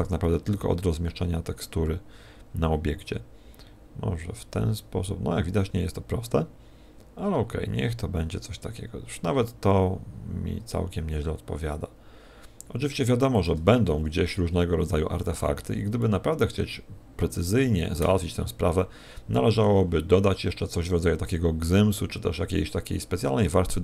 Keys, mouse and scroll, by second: 13.6 shift+click, 14.5-15.0 scroll up 5, 16.0 middle click, 20.2-21.5 scroll down 7, 21.5-22.2 scroll down 1.